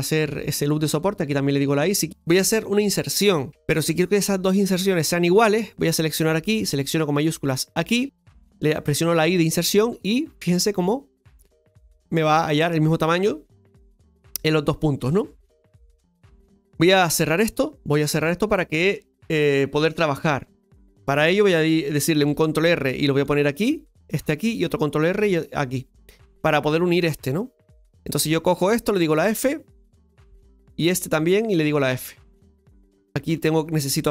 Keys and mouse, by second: 0.6 right click, 6.0 right click, 7.2 shift+right click, 22.3 ctrl+r, 27.8 right click, 28.6 shift+right click, 29.0 shift+right click, 29.8 f, 30.9 right click, 31.4 shift+right click, 31.8 shift+right click, 32.6 f.